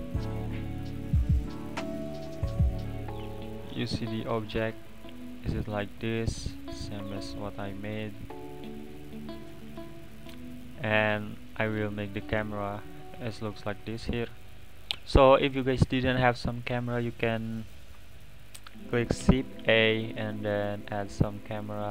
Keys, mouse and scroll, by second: 0.1-2.3 middle drag, 2.3-2.6 scroll up 2, 2.6-6.7 middle drag, 6.7 `, 8.0-11.8 middle drag, 11.8 click, 12.6 click, 13.8 click, 14.0 click, 19.6 shift+a.